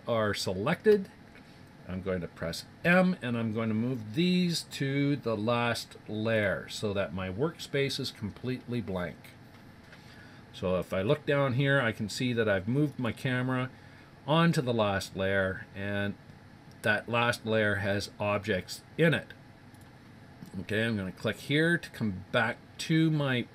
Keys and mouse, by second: 2.8 m, 12.9 click, 19.8 click.